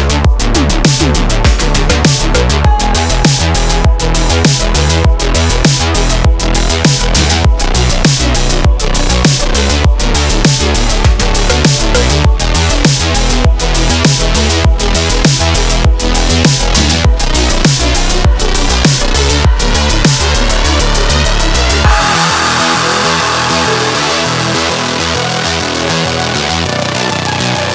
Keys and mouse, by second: 0.3 ctrl+a, 2.3-2.8 shift+drag, 6.0 g, 8.8-13.0 drag, 15.8 click, 16.6-17.4 drag, 16.6-17.4 right drag, 17.6 shift+drag, 17.6 shift+right drag, 17.8 shift+middle click, 18.1 middle drag, 18.6 click, 19.0 shift+middle click, 19.4-20.2 middle drag, 20.4 click, 22.7-27.7 drag.